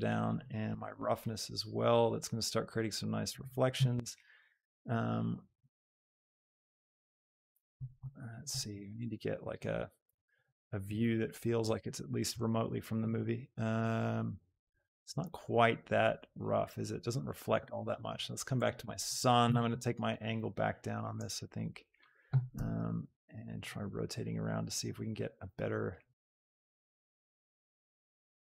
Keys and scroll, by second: 28.2 r.